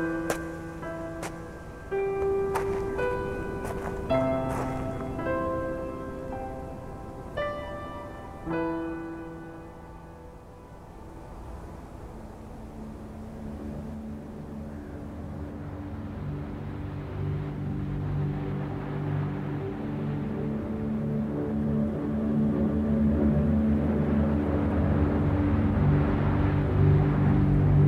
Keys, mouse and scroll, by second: 1.5 click, 2.5 KP_1, 3.1-3.4 scroll up 3, 3.4 Tab, 3.9 s, 6.6 Tab, 7.3 s, 9.1 KP_7, 9.7 scroll up 3, 10.2 s, 11.0 g, 13.3 scroll up 1, 13.5 z, 14.1-14.5 shift+middle drag, 14.5 scroll up 1, 14.8 s, 15.9 g, 16.9-17.2 scroll up 7, 17.3 g, 18.6-19.4 scroll down 9, 19.4-19.8 middle drag, 19.8 z, 20.3 shift+middle click, 20.9 KP_1, 21.3 KP_3, 21.8-22.4 scroll up 7, 22.4 g, 25.0 Tab, 25.4 a, 25.5 a, 25.9 ctrl+r, 26.7 a, 26.8 a, 27.2 scroll down 1, 27.6 middle click.